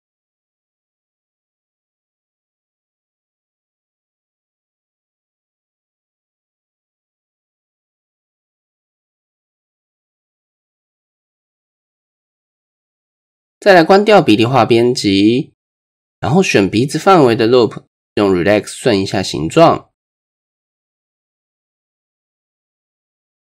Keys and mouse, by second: 1.3 KP_1, 1.7 KP_3, 2.5 shift+middle click, 4.7-7.2 drag, 7.5 middle click, 8.1 middle click, 9.5-10.0 middle drag, 10.9 middle click, 11.6 shift+middle click, 12.6 click, 12.9 middle click, 14.4 shift+middle click, 14.9 middle click, 16.1 click, 17.8 middle click, 18.9-21.4 drag, 19.2 typing, 22.0 middle click, 23.2 middle click.